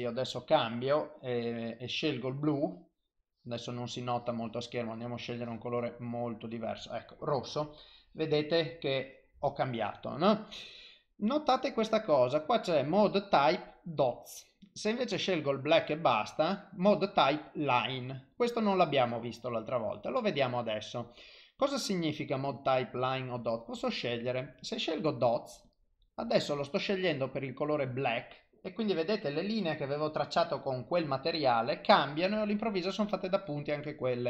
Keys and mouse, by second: 2.6 click, 3.7 click, 8.0 click, 9.0 click, 15.5 click, 23.8 click, 32.9 click.